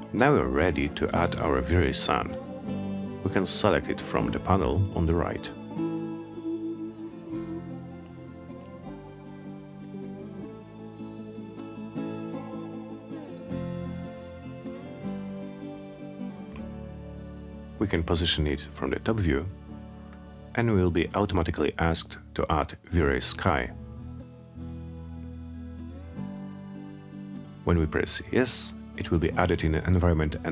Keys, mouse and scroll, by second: 4.1 click, 5.9 click, 7.5 click, 10.2 click, 11.8 middle click, 12.0 middle click, 13.3 middle click, 14.8-18.1 drag, 27.8 click.